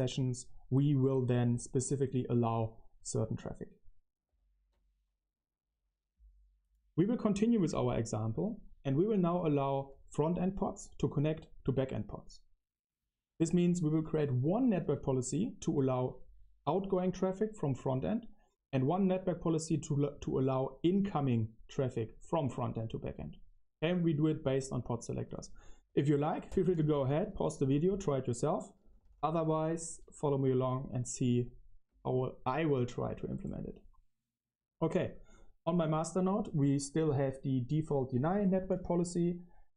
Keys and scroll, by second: 4.2 ctrl+alt+shift+3, 7.2-10.3 typing, 13.3-15.1 typing, 17.4-19.6 typing, 23.1-30.3 typing, 31.8 q, 36.9-39.4 typing.